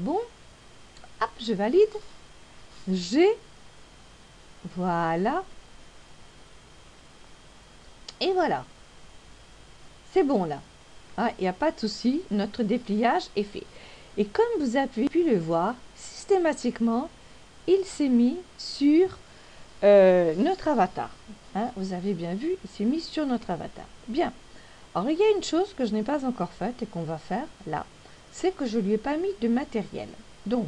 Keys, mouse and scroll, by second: 2.5 click, 4.4 g, 27.2 click.